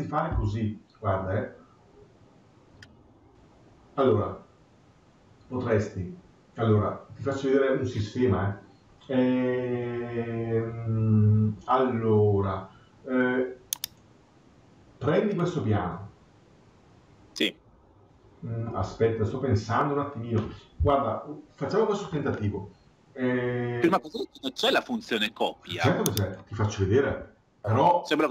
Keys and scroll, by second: 26.9 Escape.